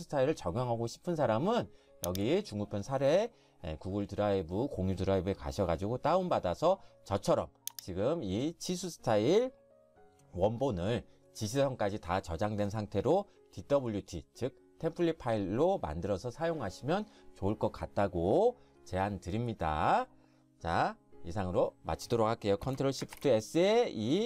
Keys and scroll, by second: 23.1 ctrl+shift+s.